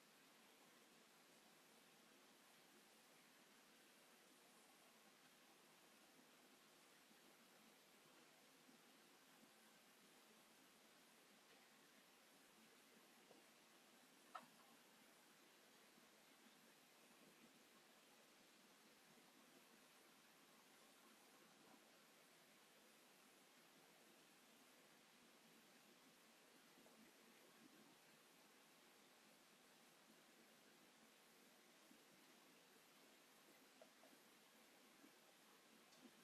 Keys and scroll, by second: 1.3 shift+e, 2.7 space, 6.0 m, 8.1 space, 8.3 space, 12.5 space, 34.5 space, 35.4 h.